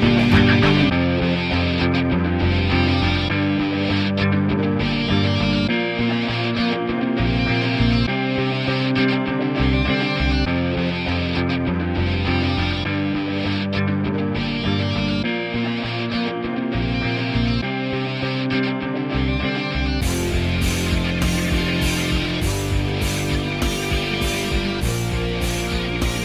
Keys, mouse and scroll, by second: 0.3 alt+middle click, 0.5 click, 0.7 alt+right click, 0.8 alt+click, 1.0 alt+right click, 1.1 alt+click, 1.6 g, 1.8 click, 1.9 f, 2.1 click, 2.4 ctrl+z, 2.7 p, 2.9 click, 3.1 f, 3.3-6.1 drag, 6.1 ctrl+z, 6.2 alt+click, 6.6 alt+right click, 6.8 alt+middle click, 7.0 alt+right click, 7.1 alt+middle click, 7.2-8.3 alt+drag, 8.3 alt+middle click, 8.4 alt+click, 8.6 alt+right click, 8.7 alt+click, 8.8 alt+middle click, 8.9 alt+click, 9.6 alt+middle click, 9.7 ctrl+z, 10.2 click, 11.1 ctrl+z, 11.4 g, 11.6 click, 11.9 f, 12.0 alt+click, 12.6 alt+middle click, 12.7 alt+click, 12.8 alt+right click, 12.9 alt+middle click, 13.0 alt+right click, 13.2 shift+c, 13.2 f, 13.9 ctrl+click, 14.4 ctrl+z, 14.6-15.7 ctrl+drag, 15.7 ctrl+z, 16.0 click, 16.6 alt+middle click, 16.8-18.0 ctrl+drag, 18.0 alt+middle click, 18.1 ctrl+alt+click, 18.9 alt+middle click, 19.0 alt+click, 19.1 ctrl+z, 19.2 alt+right click, 19.3 alt+middle click, 19.7 alt+right click, 19.7 alt+middle click, 19.9-21.0 ctrl+alt+drag, 21.0 ctrl+z, 21.2-25.4 ctrl+drag, 25.4 alt+right click, 25.5 f, 25.7 click.